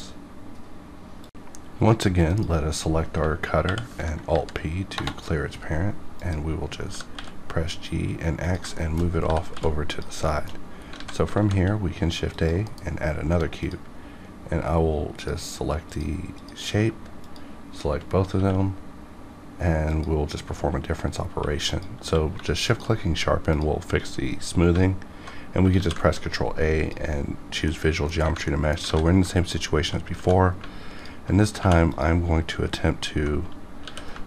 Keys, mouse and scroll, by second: 3.1 scroll up 1, 3.6 alt+p, 4.2 Down, 4.9 Return, 6.1 click, 6.2 click, 6.9 g, 7.1 x, 8.4 click, 8.4 g, 8.7 shift+middle click, 9.2 g, 9.5 x, 9.8 click, 9.9 click, 10.2 shift+middle click, 10.6 scroll down 1, 10.9 alt+a, 12.3 click, 12.6 KP_Decimal, 13.0 scroll up 1, 13.7 click, 17.2 shift+click, 17.4 shift+click, 18.3 q, 19.8 click, 21.2 1, 21.6 click, 22.0 q, 22.6 shift+click, 22.8 shift+click, 24.1-24.6 scroll down 1, 25.7 ctrl+a, 26.7 click, 27.6 middle click, 27.8 middle click, 28.4 middle click, 28.8 alt+a, 29.2 shift+middle click, 29.6 scroll up 1, 30.1 2, 30.9 alt+click, 31.0 alt+click, 31.5 2, 31.8 click, 33.8 w.